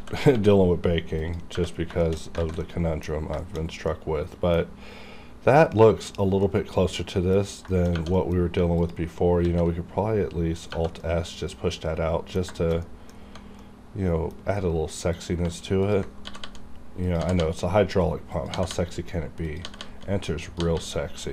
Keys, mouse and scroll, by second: 1.2 click, 1.6 Tab, 1.7 scroll down 1, 2.0 shift+middle click, 2.2 shift+scroll down 2, 2.4 alt+z, 2.6 middle click, 3.1 scroll up 1, 3.4 shift+middle click, 3.7 scroll down 1, 3.9-5.7 middle drag, 5.7 middle click, 6.2 scroll up 1, 6.4-7.7 middle drag, 7.7 shift+middle click, 8.0 scroll up 1, 8.2 middle click, 8.8 alt+click, 9.4 alt+s, 10.6 click, 10.6 click, 11.0-12.6 middle drag, 12.6 shift+middle click, 12.8 middle click, 13.2 scroll up 1, 13.6 middle click, 14.7 scroll up 1, 15.1 click, 15.2 click, 15.8 ctrl+click, 15.9 ctrl+click, 16.3 g, 16.4 g, 17.1 click, 17.1 g, 17.4 g, 18.3 click, 18.5-20.7 typing, 19.5 click, 20.4 click, 21.2 click.